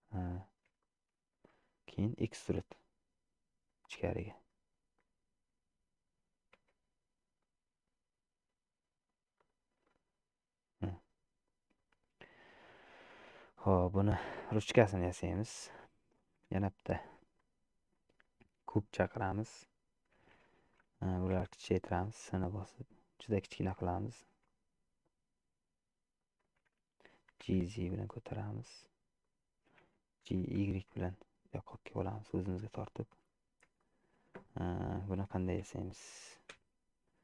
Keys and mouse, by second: 0.9 shift+middle click, 1.6 click, 2.9 e, 6.7 Tab, 7.5-9.2 middle drag, 9.4 click, 10.2-11.9 middle drag, 12.7 click, 13.5-14.5 middle drag, 15.2 middle click, 16.5 shift+a, 21.5 s, 24.5 s, 27.4 g, 30.5 g, 34.0 shift+middle click, 36.6 KP_1.